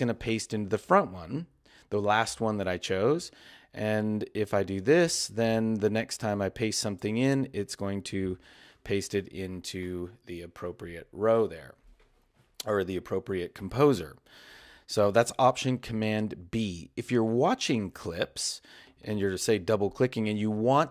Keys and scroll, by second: 8.2 alt+super+b.